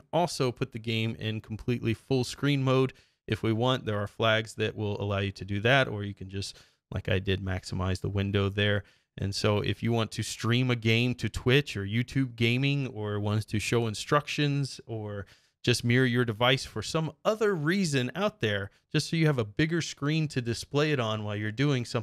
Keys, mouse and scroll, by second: 3.9 click, 5.4 click.